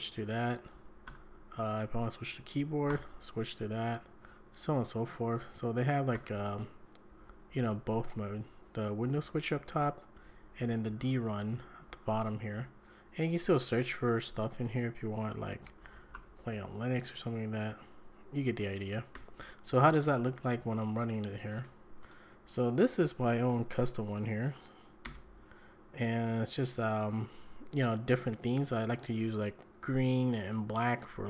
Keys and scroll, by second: 0.2 `, 0.4 `, 0.7 Up, 1.1 Return, 1.8 Down, 2.9 Return, 4.1 `, 4.4 `, 5.4 Up, 6.1 Return, 7.1 Down, 7.3 Down, 8.0 Up, 8.2 Up, 9.0 Down, 9.2 Down, 9.6 Up, 9.8 Up, 10.2 Down, 10.4 Down, 10.6 Down, 10.9 Down, 11.1 Down, 11.2 Down, 11.4 Down, 11.7 Down, 11.9 Down, 12.3 Up, 12.4 Up, 15.4-16.6 typing, 19.1 Escape, 20.4 `, 21.2 alt+F4, 21.6 alt+F4, 25.0 ctrl+space.